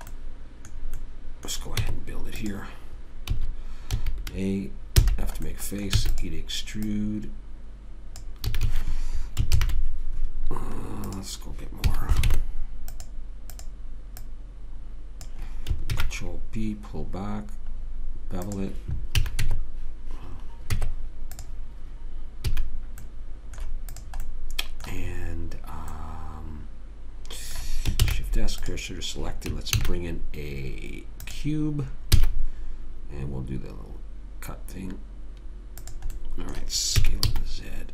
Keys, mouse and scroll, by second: 0.5 middle click, 0.9 middle click, 2.1 Tab, 3.7 a, 4.3 a, 5.4 f, 6.3 e, 7.2 click, 8.8 a, 9.0 a, 9.9 ctrl+n, 11.4 click, 12.2 a, 12.7 ctrl+Tab, 13.9-15.8 drag, 16.0 click, 16.2 ctrl+b, 19.5 a, 19.8 Tab, 21.1 Tab, 22.8 a, 23.4-25.0 middle drag, 24.3 click, 28.4 shift+s, 30.1 shift+a, 32.5 s, 36.5 middle click, 37.3 s.